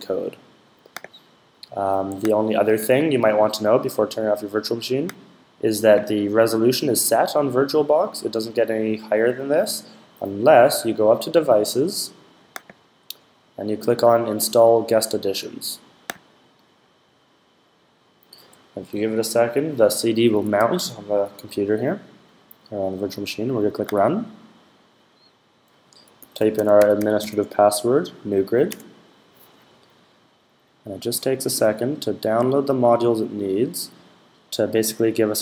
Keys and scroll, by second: 25.7-27.5 typing.